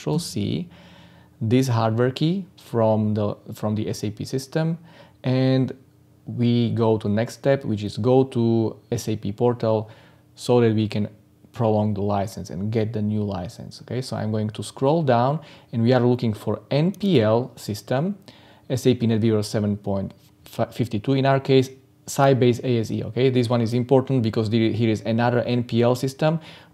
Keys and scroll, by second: 0.1 ctrl+c.